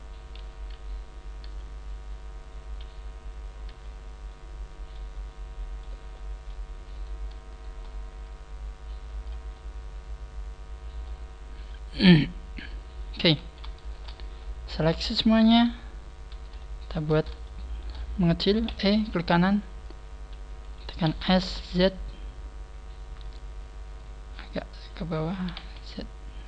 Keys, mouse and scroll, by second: 0.3 KP_1, 1.3 KP_3, 2.5 KP_1, 3.6 KP_3, 4.2 middle click, 5.3 middle click, 6.1 middle click, 6.9 middle click, 6.9 right click, 7.4 shift+right click, 8.2 click, 9.5 middle click, 11.4 scroll down 3, 11.6 middle click, 13.3 a, 13.7 alt+shift+right click, 14.3 middle click, 15.4 KP_3, 15.9 scroll down 1, 16.5 shift+middle click, 17.4 shift+middle click, 18.6 e, 19.3 right click, 19.8 right click, 19.8 click, 21.0 s, 23.3 click, 24.1 click, 25.3 s.